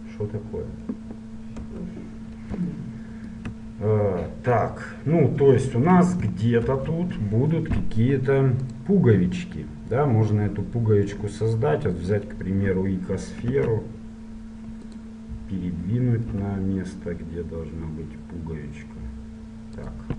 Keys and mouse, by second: 1.8 KP_1, 2.8-7.3 middle drag, 6.7 shift+a, 13.6 s, 16.5 g.